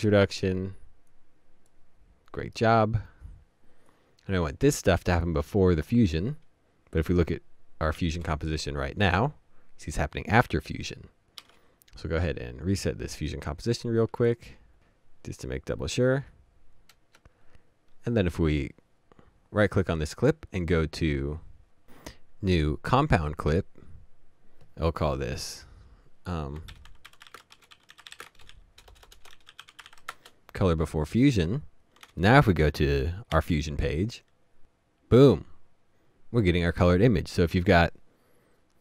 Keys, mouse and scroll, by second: 8.0 typing, 12.0 typing, 12.7 right click, 13.8-14.4 alt+scroll up 1, 14.4 right click, 16.9 right click, 26.4-30.5 typing, 26.5 right click.